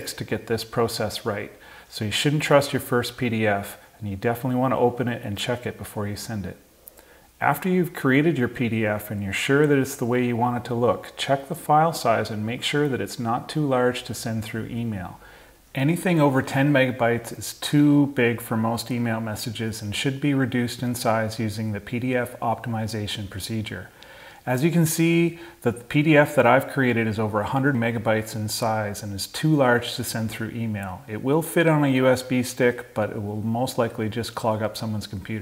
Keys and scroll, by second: 7.3 Down, 7.8 Down, 8.5 Down, 24.2 super+i.